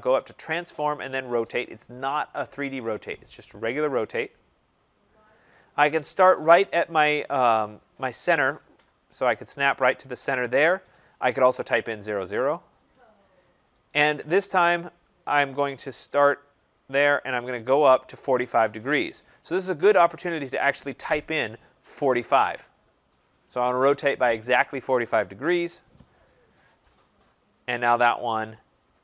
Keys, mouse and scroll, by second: 0.1-7.7 drag, 7.7 middle click, 7.7-9.9 scroll, 10.9 click, 13.2 scroll, 16.3 middle click, 16.5-21.5 drag, 21.6-22.4 typing, 25.8 Return, 28.0 Return, 28.6 right click.